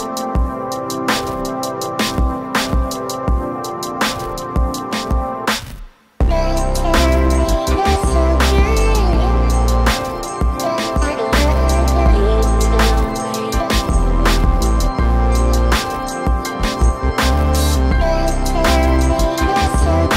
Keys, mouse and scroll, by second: 0.5 click, 1.6-2.6 scroll up 1, 3.4 click, 8.1 click, 10.6 click, 10.7-11.2 scroll down 1, 12.0 ctrl+Num_Lock, 12.0 scroll down 1, 12.2 ctrl+scroll up 1, 12.9 ctrl+scroll down 1, 13.8 ctrl+scroll up 1, 14.2 ctrl+scroll down 1, 14.8 click, 15.9 click, 17.2 click, 18.9 click.